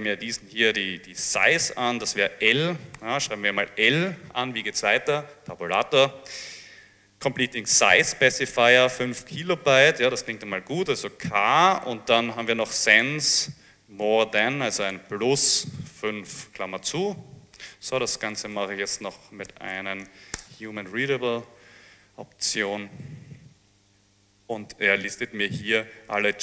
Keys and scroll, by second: 3.0 shift+l, 5.8 Tab, 11.3 k, 16.1 5, 16.7 shift+9, 18.4 Home, 18.8 Right, 19.0 Right, 19.6 space, 19.8 -, 20.1 h, 20.4 Return.